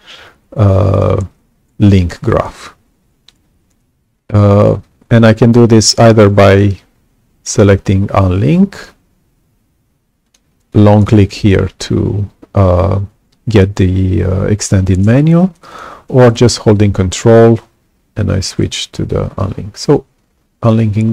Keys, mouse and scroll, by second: 5.8 click, 10.2 click, 10.6 click, 15.6 right click, 20.6 ctrl+click.